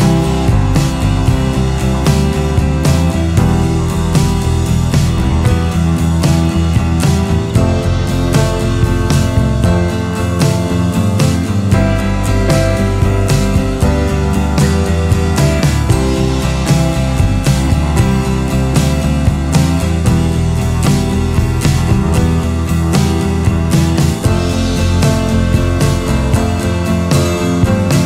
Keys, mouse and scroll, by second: 4.6 scroll, 11.6 ctrl+z, 19.4 alt+space, 26.5 ctrl+z.